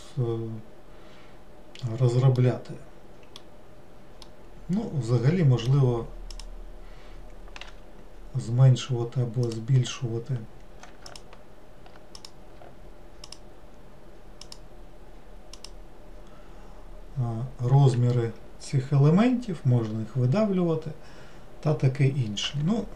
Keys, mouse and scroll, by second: 2.4-6.4 middle drag, 6.4 click, 9.5 click, 11.1 alt+click, 12.2 click, 13.3 alt+click, 14.5 alt+click, 15.6 alt+click.